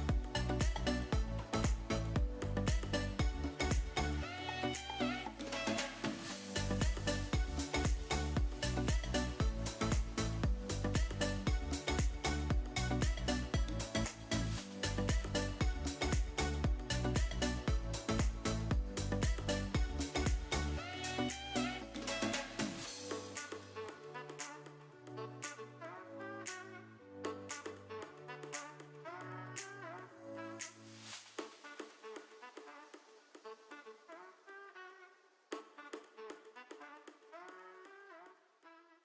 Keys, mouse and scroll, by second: 1.7 right click, 3.6-4.5 drag, 5.8 ctrl+r, 7.9 click, 8.7 middle click, 9.1 Tab, 9.8-11.7 middle drag, 13.1 click, 15.2 click, 16.2 middle click, 17.3 shift+middle drag, 19.3-19.6 shift+middle drag, 20.3 click, 20.9-21.2 drag, 21.5 middle click, 22.2-22.7 drag, 23.0 middle click, 23.8-24.1 drag, 26.7-30.6 drag, 31.2 middle click, 32.2-33.3 drag, 34.2-36.1 drag, 38.3 shift+middle click.